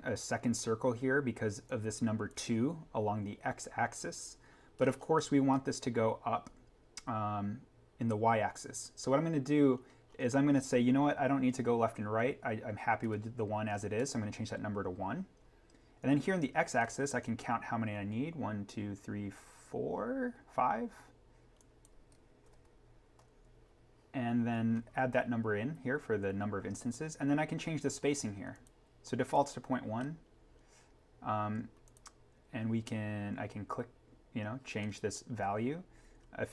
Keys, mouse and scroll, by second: 1.6 click, 4.7 scroll up 1, 9.6-11.9 scroll down 1, 12.9-13.9 typing, 13.9 Tab, 16.7-17.2 scroll up 1, 21.5 click, 22.4 5, 23.0 Tab, 24.4-26.1 scroll down 1, 28.5 click, 29.9-31.8 scroll up 1, 31.8 click, 32.9-33.6 scroll down 1.